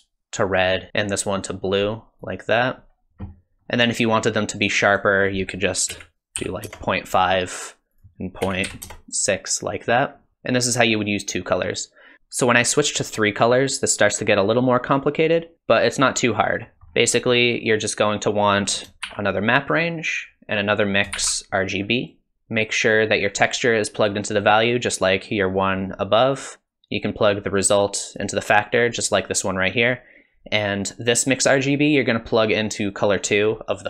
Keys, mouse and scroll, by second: 0.9 click, 3.6 middle click, 4.8 click, 8.8 click, 16.7 middle click, 16.9-17.2 scroll down 2, 17.1 middle click, 18.5 click, 19.0 shift+d, 20.9 click, 21.1 shift+d, 22.9 click, 26.7 click, 31.5 click.